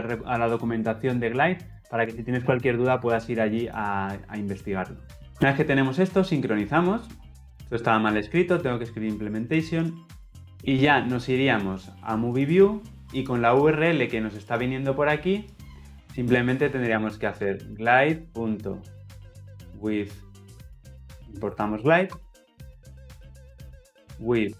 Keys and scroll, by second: 21.9 alt+Return.